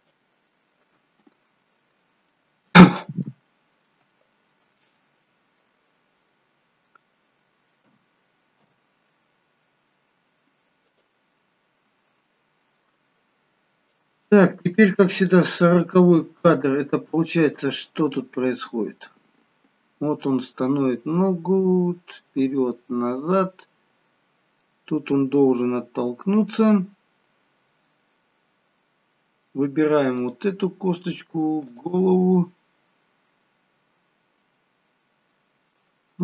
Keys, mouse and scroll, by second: 0.5 middle click, 2.6 middle click, 3.4 middle click, 4.0 shift+middle click, 4.8 middle click, 7.8 a, 8.5 i, 12.3 shift+middle click, 14.2 click, 15.7 middle click, 17.4 click, 27.1-27.9 scroll down 2, 29.1-30.0 scroll down 1, 30.0 click, 30.0-30.5 scroll up 3, 31.8 shift+click.